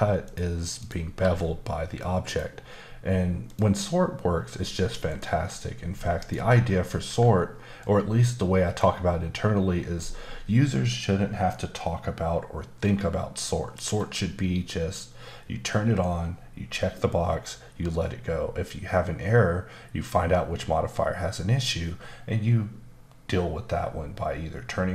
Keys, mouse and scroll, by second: 0.2 click, 0.8 click, 1.2 g, 2.3 click, 3.5 click, 5.1 click, 6.2 click, 7.8 click, 7.8 click, 11.0 scroll down 1, 11.5 middle click.